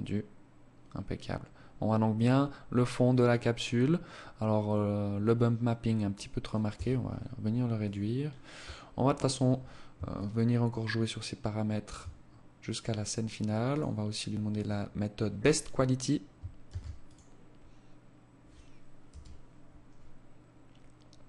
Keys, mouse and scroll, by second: 5.6 Escape, 6.8 click, 7.2-8.3 scroll down 14, 9.1 shift+click, 12.6 click, 15.6 ctrl+s.